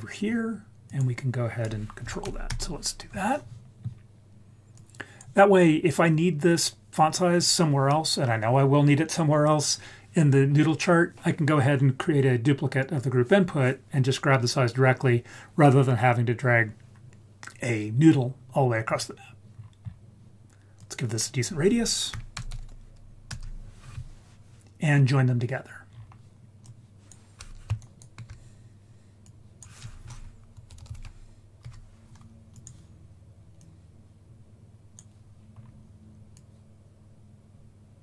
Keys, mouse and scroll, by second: 0.8-2.5 drag, 4.7 click, 18.8-19.4 scroll down 3, 19.5-20.7 scroll up 4, 20.7-23.3 drag, 22.5 0, 25.8-26.6 scroll down 3, 26.6 click, 27.8 ctrl+right click, 29.2 click, 29.6-31.6 drag, 32.5 click, 33.5 click, 33.7-35.0 drag, 35.5-36.3 scroll up 2, 36.3-38.0 drag.